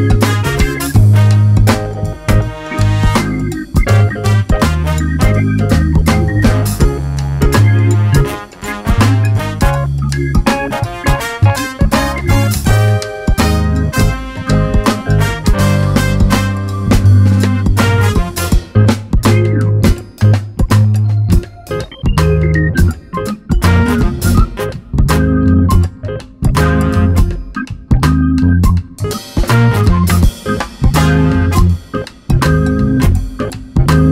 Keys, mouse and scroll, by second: 0.2 scroll up 1, 1.2-7.3 drag, 9.6 click, 10.5 click, 10.8 Delete, 10.9 click, 11.1 Delete, 13.6-14.0 scroll up 1, 14.3-15.9 drag, 15.4 ctrl+z, 16.6 scroll down 1, 17.3-22.2 drag, 18.3 scroll down 1, 18.4 alt+a, 18.7 scroll up 1, 22.3 scroll up 1, 24.0 Delete, 25.1 ctrl+z, 25.2 click, 26.1 Delete, 26.4 `, 26.7 click, 27.7 Delete, 29.0-30.5 drag, 29.6 scroll down 1, 31.2 scroll up 1, 31.4-32.0 scroll down 1, 32.6-34.1 drag.